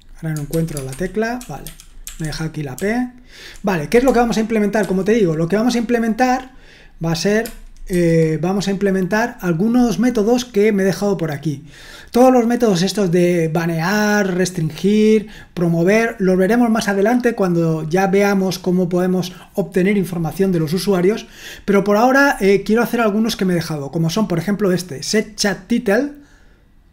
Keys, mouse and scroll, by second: 0.7-3.5 typing, 0.9 Escape, 2.2 Escape, 4.8 super+2, 8.0 alt+1.